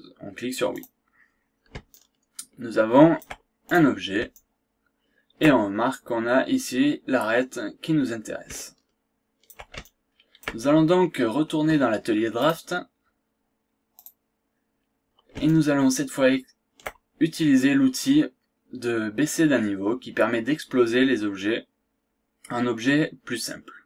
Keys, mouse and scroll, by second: 0.8 click, 2.0-3.4 shift+right drag, 3.7 shift+click, 4.3-5.7 shift+right drag, 8.5-9.6 shift+right drag, 9.8 shift+right click, 10.7 shift+scroll down 1, 11.0 scroll up 1, 11.7 scroll up 1, 12.4 click, 14.0 click, 14.5 scroll down 1, 14.8-15.1 scroll up 1, 15.5-17.0 shift+right drag, 17.2 shift+scroll up 1.